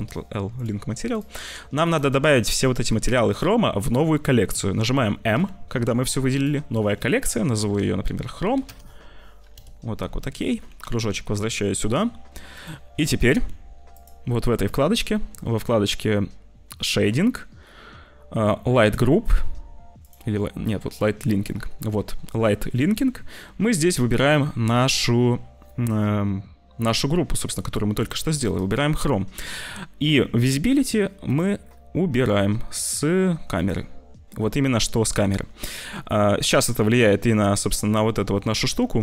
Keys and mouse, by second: 1.8 click, 5.3 m, 10.3 click, 10.8 g, 12.0 middle click, 13.2 ctrl+s.